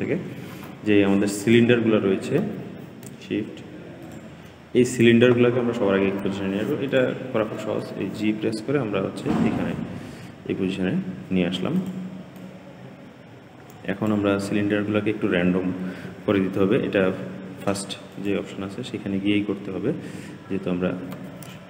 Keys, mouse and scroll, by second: 0.0-1.3 scroll down 5, 1.3 click, 3.9 shift+click, 6.7 click, 7.7 g, 12.2-15.3 drag, 18.0-19.3 drag, 19.3-20.3 scroll down 9, 21.4 shift+middle click.